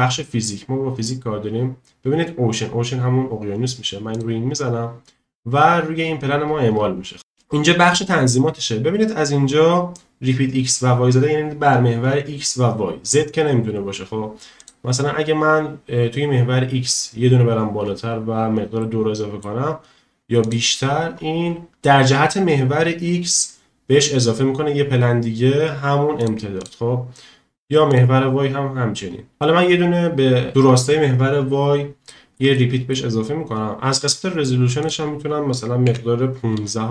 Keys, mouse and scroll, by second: 18.8-19.4 middle drag, 20.4 click, 21.7 shift+middle click, 26.6 click, 27.9 click, 32.1 shift+middle drag, 32.5 middle click, 34.8-36.9 drag.